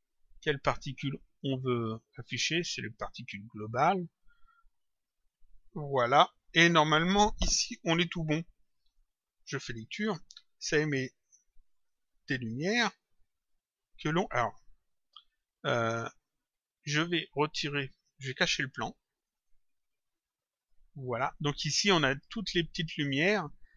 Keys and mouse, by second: 1.2 click, 2.5 click, 5.3 click, 8.7 click, 11.6 click, 18.2 click.